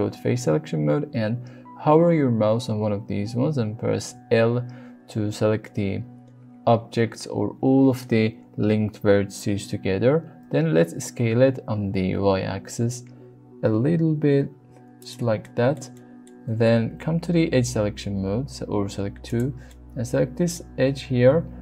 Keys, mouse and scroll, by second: 4.1 l, 10.4 s, 10.8 x, 12.0 y, 14.9 click, 15.4 shift+middle click, 16.0 middle click, 16.9 2, 19.7 middle click.